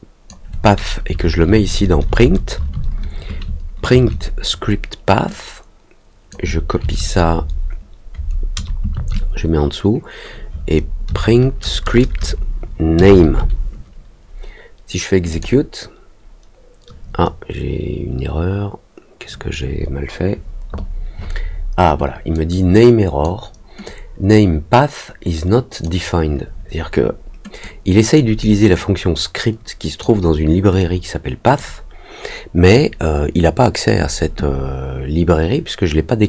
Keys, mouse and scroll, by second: 5.2-6.2 drag, 15.2 click, 22.3 click, 23.8-25.8 drag, 27.6 click, 28.7-29.9 drag, 30.7 click.